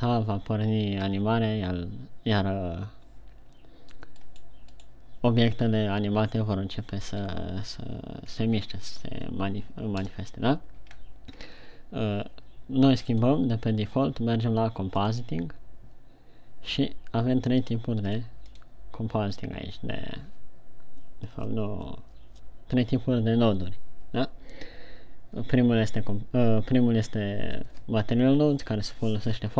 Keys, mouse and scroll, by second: 0.0 alt+a, 1.6 Escape, 4.9 right click, 7.6 KP_1, 8.7-9.0 scroll down 2, 10.6 KP_0, 11.5-12.0 scroll up 1, 12.0 scroll down 2, 13.7 click.